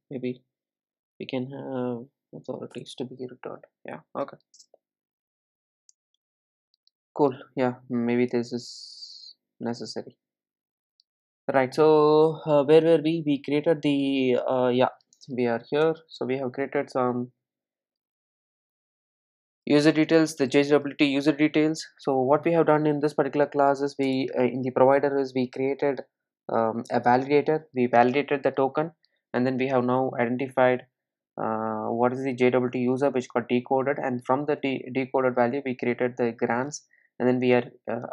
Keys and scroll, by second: 3.0 Return, 15.8 ctrl+alt+l.